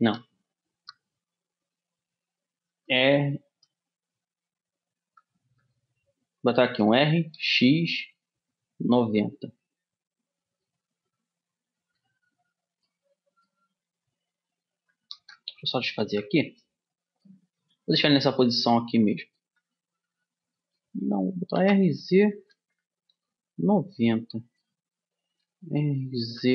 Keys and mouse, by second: 7.3 r, 16.6 ctrl+z, 18.0-19.6 middle drag, 20.1-21.3 middle drag, 21.3 r, 25.9 r.